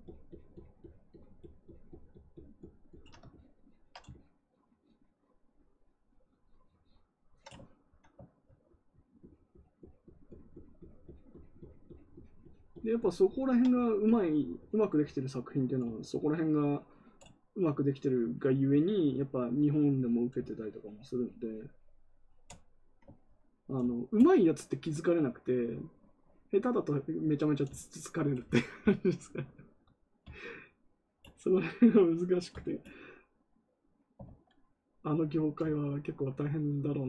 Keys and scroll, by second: 34.2 ctrl+z.